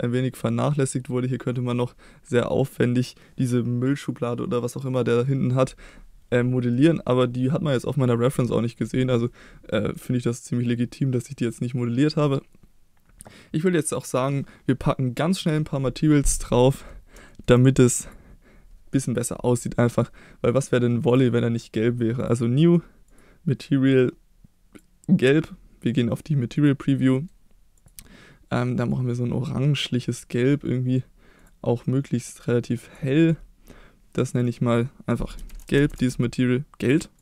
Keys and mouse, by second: 6.7-7.1 middle drag, 9.3-9.9 middle drag, 11.2 middle click, 16.7 middle click, 17.3 shift+middle drag, 21.1 click, 22.2 click, 23.1 click, 26.6-27.2 drag, 27.2 middle click, 31.4 drag, 34.3 click, 34.5-37.2 drag.